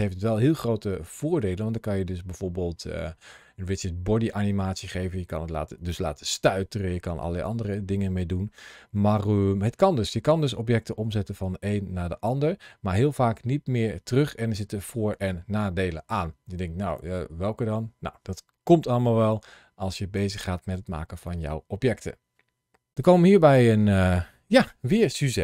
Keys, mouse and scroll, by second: 0.3 middle click, 6.7 scroll down 2, 22.9 shift+middle click.